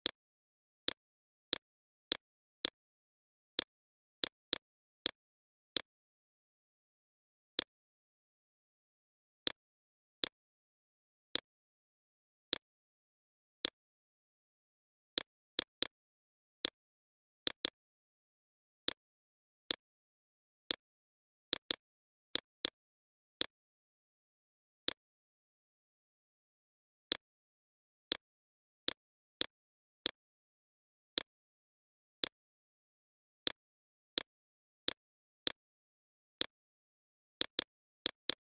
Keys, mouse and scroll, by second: 2.1 right click, 2.7-4.7 drag, 4.9 right click, 5.4 click, 5.9 right click, 6.5 click, 6.8 right click, 8.3 alt+click, 9.3 click, 12.3-22.6 shift+drag, 24.3 alt+shift+click, 29.4 click, 29.7 right click, 30.1 click, 31.2 right click, 31.5-33.8 drag, 34.5 click, 36.8 click, 37.5 right click, 38.0 click.